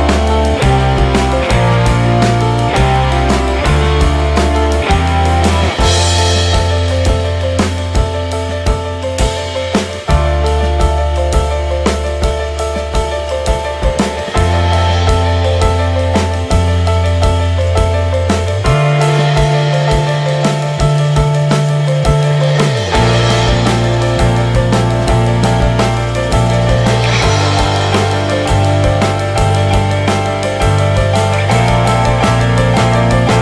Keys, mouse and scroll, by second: 0.4 ctrl+s, 0.6 scroll down 3, 0.8 click, 1.3-1.7 middle drag, 1.7 shift+a, 3.5 shift+middle click, 3.7-4.6 scroll up 1, 4.6 ctrl+z, 4.8 shift+middle drag, 5.1 shift+a, 6.4 s, 7.3 s, 7.9 click, 8.4 ctrl+s, 8.8-11.1 drag, 12.4-12.9 scroll down 5, 12.9-14.1 shift+middle drag, 14.1 click, 15.1 click, 15.4 Tab, 16.2 click, 16.5 middle click, 17.2 click, 17.5-17.9 scroll up 1, 17.9 click, 19.2 scroll down 1, 19.5 Tab, 19.8 drag, 20.0 alt+middle click, 21.0 click, 21.7 ctrl+z, 21.9-22.9 alt+middle drag, 22.9 r, 24.2 shift+middle drag, 25.3 shift+middle click, 25.7 r, 27.9 shift+middle click, 28.0-28.4 scroll up 1, 28.4 click, 29.9 shift+middle click, 30.0-30.7 scroll up 1, 30.7 click, 32.0 click.